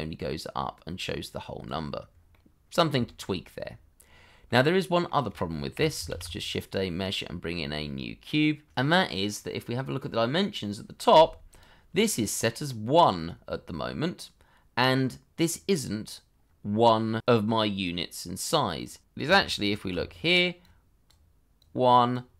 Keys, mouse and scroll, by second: 3.0 shift+middle click, 3.3-3.9 scroll up 1, 3.9-4.4 scroll down 1, 4.4 middle click, 5.7 Delete, 6.0 shift+a, 8.7 middle click, 15.8 scroll up 1, 18.1-18.9 scroll down 1, 19.9 d.